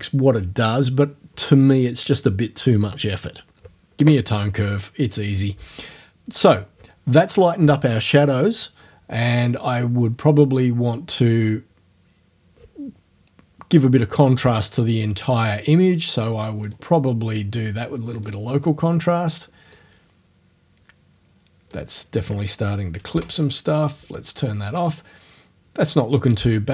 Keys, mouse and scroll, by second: 11.1 click, 16.7 click, 18.2 click, 18.6 click, 19.8-21.9 drag, 23.2 o.